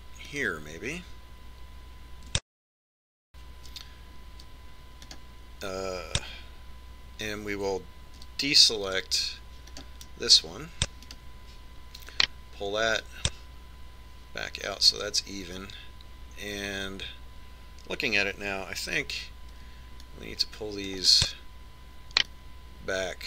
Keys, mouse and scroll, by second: 6.0 click, 9.2 c, 12.2 right click, 13.1 click, 19.5 a, 22.2 right click, 22.2 c.